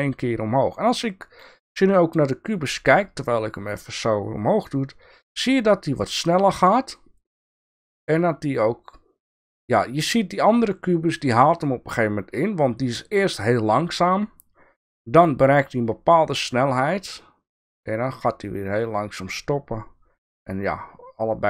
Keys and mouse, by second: 3.6-5.4 drag, 18.8-21.4 drag.